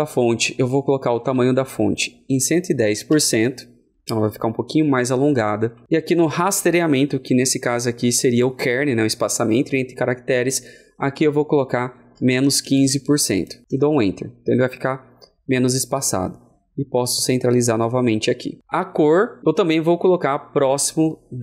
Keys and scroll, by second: 1.2 shift+Left, 2.2 shift+KP_1.